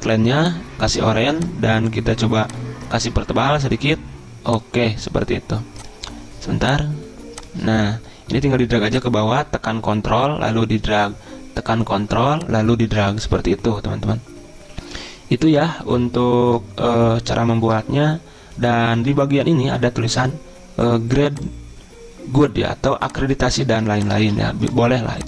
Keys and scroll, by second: 24.3 ctrl+a.